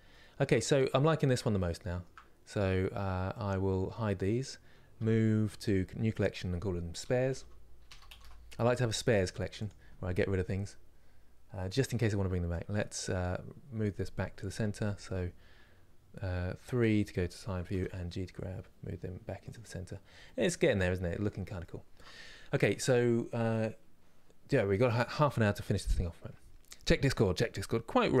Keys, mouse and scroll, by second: 1.1-1.5 scroll down 3, 1.5-3.6 shift+middle drag, 3.6 click, 11.4 click, 12.5 click, 14.2 KP_1, 17.5 g, 19.5 scroll up 1, 19.9-28.2 shift+middle drag.